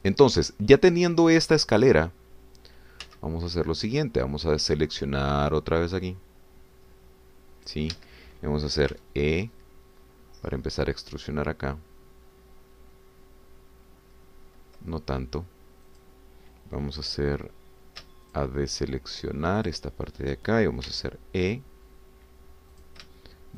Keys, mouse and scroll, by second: 4.0 c, 4.9-8.9 drag, 8.9 Escape, 10.0 e, 16.9 click, 19.4 shift+click, 19.7 shift+click, 20.1 shift+click, 20.6 shift+click, 21.9 e.